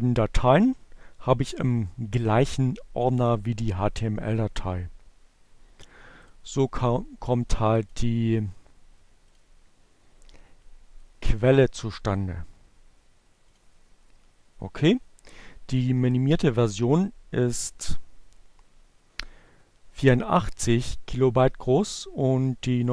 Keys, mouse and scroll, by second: 1.2 click, 7.9 click, 8.9 click, 10.9 click, 12.7 click, 14.5 click, 15.6 click, 16.3 click, 22.1 click.